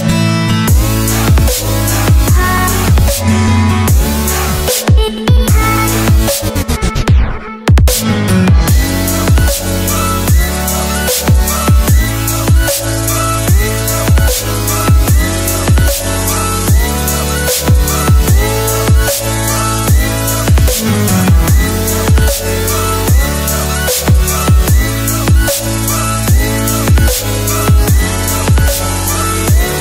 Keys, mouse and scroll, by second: 0.5 Tab, 1.2 e, 1.4 click, 1.6 scroll down 1, 2.2 scroll down 1, 3.0 scroll up 1, 3.6 click, 4.3 Return, 4.5 click, 5.6 right click, 7.4 click, 12.9 click.